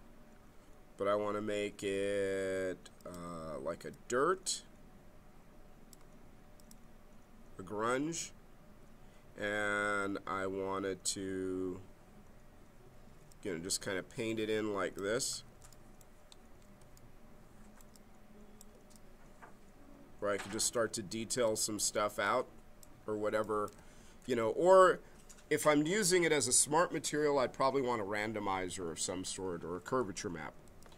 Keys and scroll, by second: 15.3 ctrl+z, 23.9 ctrl+z.